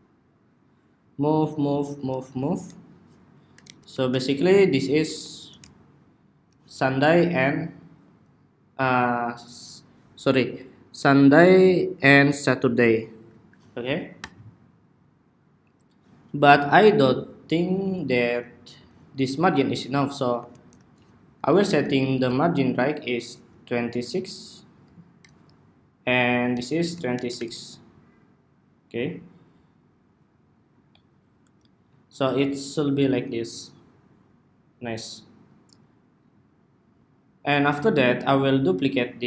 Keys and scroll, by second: 3.3 alt+shift+Right, 4.7 alt+Left, 4.8 alt+Left, 20.1 alt+shift+Left, 20.4 alt+shift+Left, 21.5 alt+shift+Right, 26.8 alt+shift+Right.